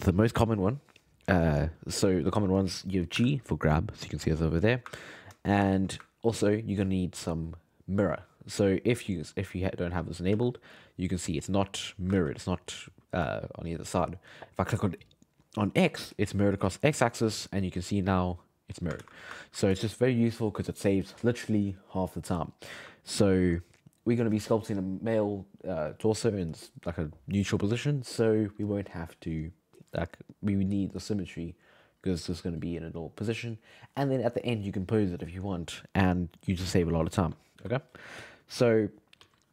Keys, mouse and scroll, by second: 3.2 g, 5.0-7.5 ctrl+middle drag, 7.5 click, 9.6 click, 10.3 f, 10.8-12.1 drag, 12.1 ctrl+z, 13.8 click, 17.8-19.0 drag, 19.0 ctrl+z, 19.4-22.8 ctrl+middle drag, 23.1-26.2 ctrl+middle drag.